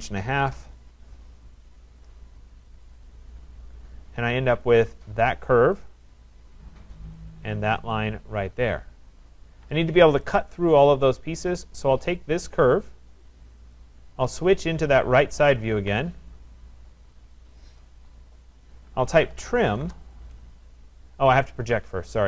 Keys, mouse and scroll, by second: 0.0-0.8 typing, 2.8 click, 3.0 click, 3.7 scroll, 4.0 Return, 4.0 middle click, 4.7 click, 5.9 click, 6.4-7.8 scroll, 6.4 middle click, 6.6 middle click, 7.8 scroll, 7.9 click, 9.1 scroll, 9.5 Escape, 11.2 right click, 12.3 click, 12.8 middle click, 14.4 click, 14.4 click, 15.5 click, 15.7 click, 16.3-18.5 scroll, 19.1-20.7 typing, 21.7 Escape.